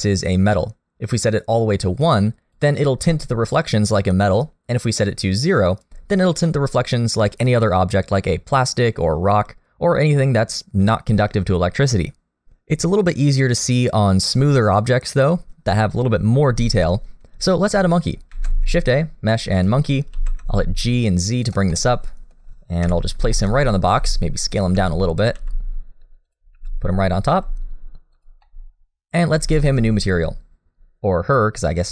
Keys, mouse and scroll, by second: 0.3 click, 3.1 middle click, 5.0 click, 7.5 middle click, 18.3 shift+a, 20.1 g, 21.7 middle click, 22.8 KP_3, 23.3 shift+middle click, 23.8-24.8 scroll down 1, 23.8 s, 24.8 r, 25.3 g, 26.5 r, 27.3 g, 28.4 middle click, 29.6 shift+middle click, 29.9-31.3 scroll up 1.